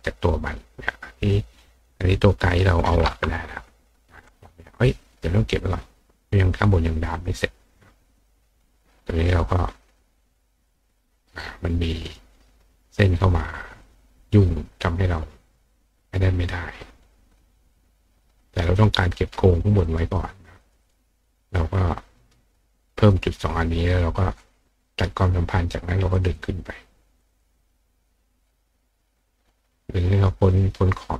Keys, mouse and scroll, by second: 1.1 click, 1.8 click, 5.6 click, 7.1 click, 8.1 click, 10.5 click, 11.4 click, 12.0 click, 13.8 click, 17.7 click, 18.5 click, 18.7 click, 19.8 click, 20.1 click, 20.6 click, 20.8 click, 21.5-22.3 drag, 24.8 click, 26.1 click, 26.3 click, 27.2 click, 27.4 click, 28.0-28.7 drag, 29.3-30.6 drag.